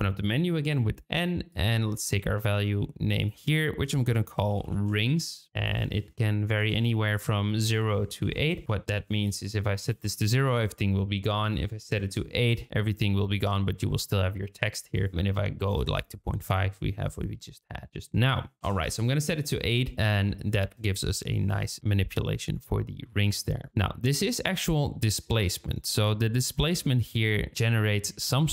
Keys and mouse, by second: 3.2-5.5 drag, 5.8-7.5 drag, 7.8 click, 8.6 n, 9.4-10.5 drag, 11.3-12.5 drag, 14.9-16.2 drag, 18.3-21.8 drag.